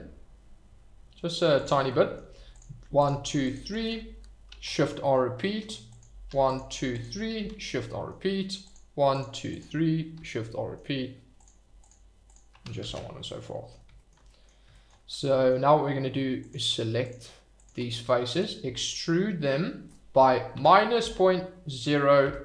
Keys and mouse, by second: 1.5 click, 1.8 middle click, 2.5 click, 4.5 shift+r, 4.8 middle click, 7.5 shift+r, 7.8 middle click, 8.7 click, 10.2 shift+r, 10.5 middle click, 11.3 click, 12.8 shift+r, 13.3 click, 14.2 middle click, 14.8 shift+middle click, 15.3 middle click, 17.9 middle click, 18.6 e, 20.5 -, 22.2 0.